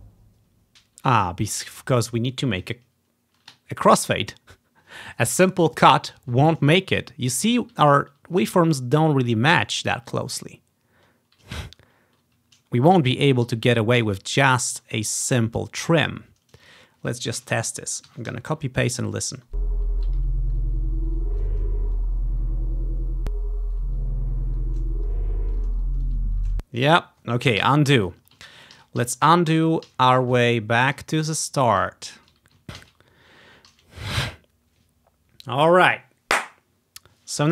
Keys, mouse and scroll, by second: 0.0 ctrl+v, 7.0-7.7 ctrl+scroll up 2, 8.1-8.5 scroll up 1, 10.1-10.8 scroll down 1, 10.8-11.6 scroll down 1, 11.7-12.3 scroll down 1, 12.3-14.9 scroll down 1, 13.6 ctrl+z, 14.1 ctrl+z, 15.4 ctrl+scroll up 1, 16.1-17.9 drag, 17.5 ctrl+c, 18.2 Right, 18.4 ctrl+v, 19.2-20.6 drag, 19.4 space, 20.5-21.9 ctrl+scroll up 1, 25.3 ctrl+scroll down 2, 26.5 space, 26.9-28.8 ctrl+drag, 27.7 Delete, 28.9 ctrl+z, 29.1 ctrl+z, 29.4 ctrl+z, 29.7 ctrl+z, 30.0 ctrl+z, 30.3 ctrl+z, 32.9 ctrl+z, 33.8 ctrl+z.